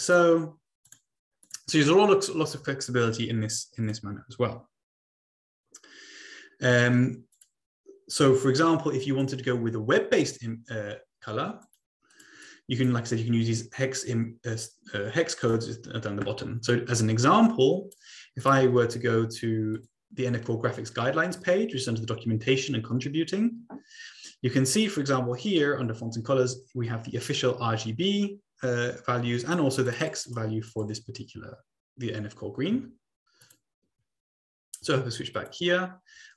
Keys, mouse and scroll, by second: 0.0 click, 0.8 click, 1.4 click, 3.8 click, 4.1-4.8 scroll down 2, 7.3 click, 9.2 click, 11.6 click, 12.1 click, 12.5 click, 15.4 click, 17.0 click, 17.8-19.1 drag, 19.1 Escape, 19.8-20.6 drag, 23.7-25.6 scroll down 2, 25.6 scroll down 1, 29.8 click, 30.1 click, 30.6 click, 31.0 click, 35.1 click, 35.8 click.